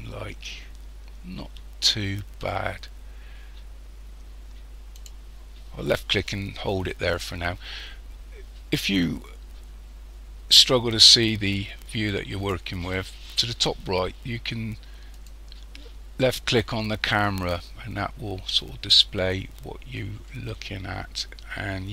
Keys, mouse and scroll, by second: 10.6 click, 15.2 click.